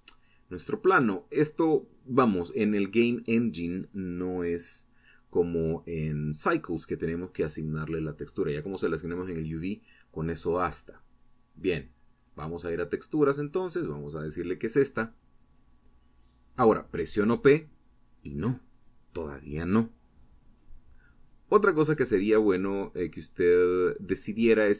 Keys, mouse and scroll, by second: 3.9 click, 4.9 click, 7.1 click, 9.1 click, 10.1 click, 10.6 click, 11.8 click, 14.5 p, 16.9 Escape, 17.5-19.4 typing, 19.7-20.4 scroll down 4, 21.0-21.8 scroll down 2, 22.1 scroll down 2, 24.4 click.